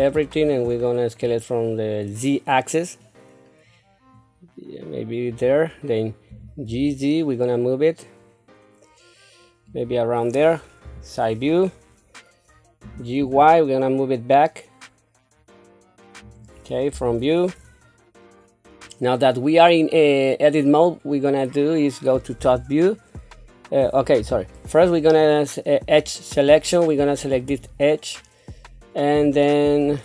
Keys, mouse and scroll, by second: 1.2-5.4 drag, 6.3 g, 10.8 KP_3, 12.8 g, 16.9 KP_1, 22.4 KP_7, 24.2 KP_1, 27.4 click, 29.9 click.